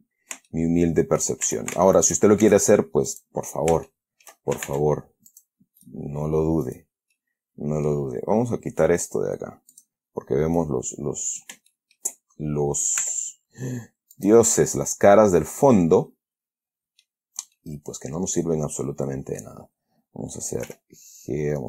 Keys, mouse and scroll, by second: 0.8 shift+middle click, 1.8 shift+a, 2.3 alt+shift+right click, 2.7 alt+shift+s, 3.4 click, 4.2 shift+middle click, 5.0 ctrl+shift+Tab, 5.6 click, 6.1 right click, 7.0 right click, 7.5 middle click, 10.1 click, 10.9-11.9 middle drag, 12.0 shift+middle click, 13.3 e, 14.5 click, 14.8-17.5 middle drag, 17.9 middle click, 21.0 g.